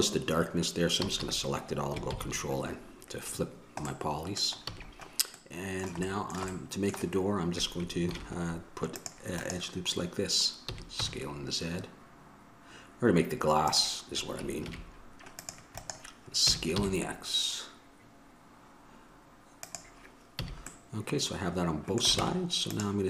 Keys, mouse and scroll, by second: 1.2 a, 1.4 a, 2.3 ctrl+n, 4.8 a, 8.2-9.6 drag, 8.3 ctrl+r, 10.8 s, 14.8 ctrl+r, 16.7 s, 20.6 a, 21.1 middle click, 22.4 ctrl+Tab.